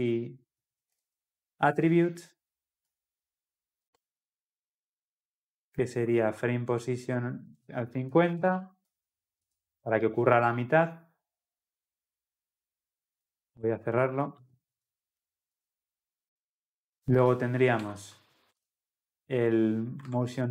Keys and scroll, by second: 1.7 Return, 8.9 Return, 14.4 ctrl+z.